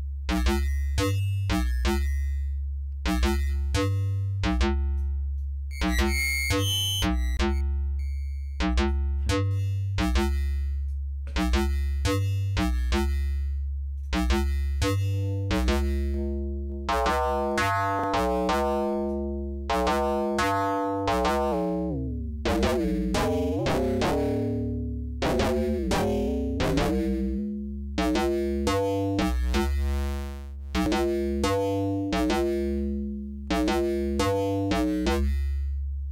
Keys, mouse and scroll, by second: 0.1-0.6 scroll down 4, 3.4-5.2 drag, 5.4-6.8 drag, 7.0-9.1 drag, 9.5-11.1 drag, 14.0 click, 14.8-19.3 drag, 21.0-24.2 drag, 24.5-24.9 scroll down 1, 25.3-26.2 scroll down 2, 26.3-27.6 scroll up 5, 28.8-31.5 drag, 34.8-36.1 drag.